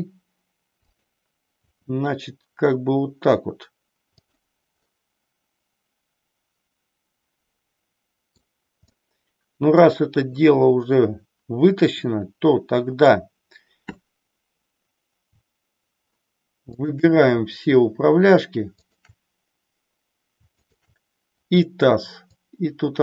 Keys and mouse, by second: 1.6 r, 4.9-8.4 middle drag, 8.8-9.9 middle drag, 12.0-13.1 middle drag, 16.8-17.9 shift+drag, 20.6 shift+click, 22.2-23.0 drag.